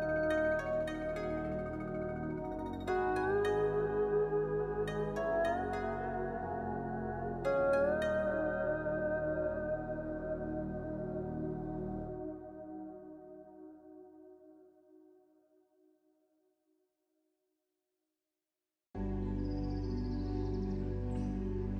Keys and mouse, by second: 1.1 shift+click, 1.4 click, 2.3 click, 6.3 click, 6.8 shift+click, 7.1 click, 7.6 click, 7.8 click, 12.1 click, 12.4 shift+click, 12.7 click, 13.2 click, 13.3 click, 13.9 click, 14.3 middle click, 17.2 ctrl+r, 18.5 click, 18.9 click, 19.1 middle click, 19.5 shift+click, 19.6 middle click, 21.1 click.